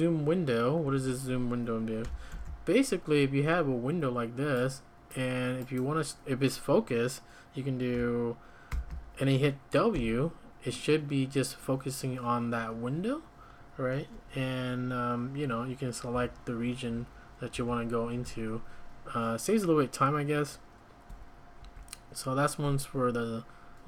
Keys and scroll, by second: 0.8 `, 2.3 alt+super+f, 2.3 typing, 8.9 ctrl+;, 9.9 w, 16.1 u, 16.9 y, 17.5 h, 18.2 h, 21.1 Escape, 21.6 `.